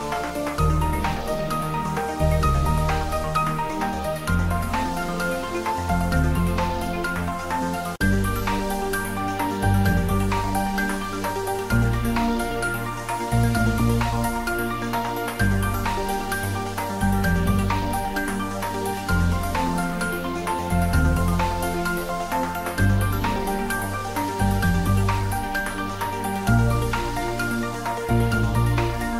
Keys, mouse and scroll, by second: 0.1-1.0 typing, 1.2 click, 1.4 ctrl+middle click, 2.0-2.9 typing, 3.5 click, 4.0 r, 6.0 click, 7.7-8.6 typing, 9.8 click, 10.0 ctrl+s, 11.2 ctrl+middle click, 11.9 shift+middle click, 12.6 click, 13.1 ctrl+s, 13.4 ctrl+middle click, 13.9 shift+middle click, 14.4-15.9 ctrl+middle drag, 15.9 click, 17.9 shift+middle click, 18.7-19.9 ctrl+middle drag, 19.9 shift+click, 21.0 ctrl+middle click, 21.8 3, 22.9 shift+click, 23.8-26.3 middle drag, 26.3 click, 28.4-29.1 typing.